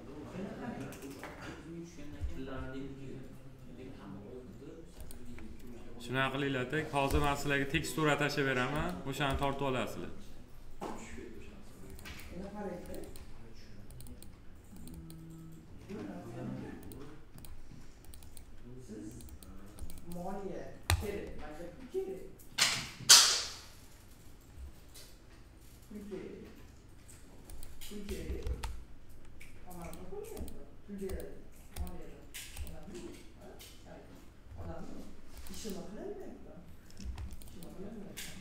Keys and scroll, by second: 28.4 ctrl+c.